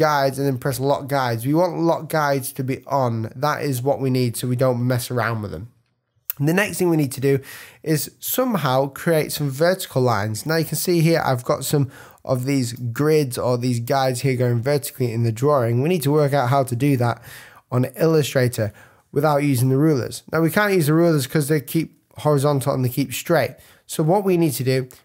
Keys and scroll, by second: 6.7 super+-, 7.3 super+=, 11.7 space, 16.6 super+-, 22.4 super+z.